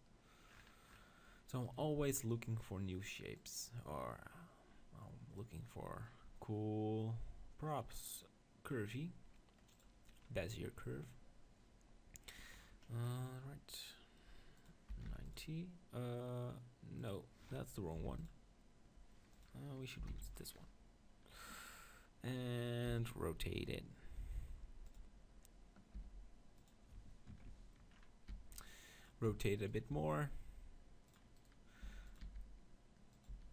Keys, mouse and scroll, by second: 0.0-1.5 drag, 1.5-4.0 middle drag, 4.0-5.3 drag, 12.6-14.6 middle drag, 14.6-16.5 drag, 17.0-18.9 drag, 19.3-21.2 drag, 22.9 r, 24.9-26.7 drag, 26.0 g, 27.9-29.0 middle drag, 28.3 r, 29.0-32.1 drag, 29.4 Tab, 29.6-30.8 right drag, 29.9 r, 31.1-32.1 right drag, 31.9 g, 32.2 r, 33.2-33.5 right drag, 33.4 g.